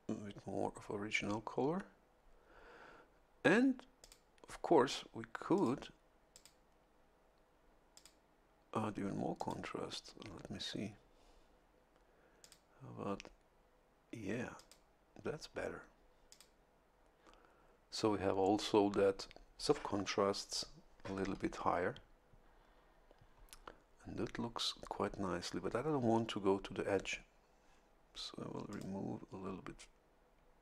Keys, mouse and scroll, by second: 4.0 click, 5.5 click, 6.3 click, 7.9 click, 9.3 click, 12.4 click, 14.5 click, 16.3 click, 28.7 click.